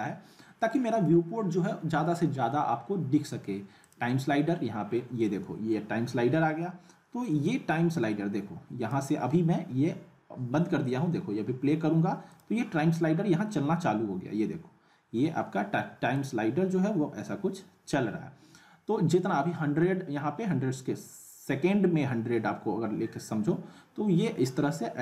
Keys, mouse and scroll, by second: 3.8 click, 7.4-9.0 drag, 12.3 click, 16.2-18.0 drag.